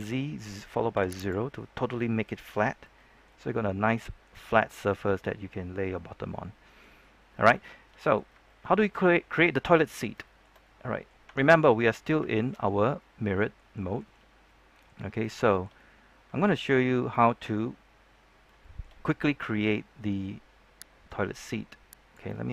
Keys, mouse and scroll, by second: 0.9 0, 1.1 click, 2.5 Tab, 2.8-7.5 middle drag, 8.0-9.7 scroll up 2, 9.7 middle click, 10.2 shift+middle click, 11.2 Tab, 11.5 scroll down 1, 11.6 middle click, 12.2 shift+middle click, 14.1 scroll up 1, 14.4 middle click, 15.0 scroll up 1, 15.3 shift+middle click, 16.9-17.7 scroll down 1, 17.9-18.4 scroll up 1, 18.5-20.0 shift+scroll up 1, 21.0 click, 22.4 shift+middle click.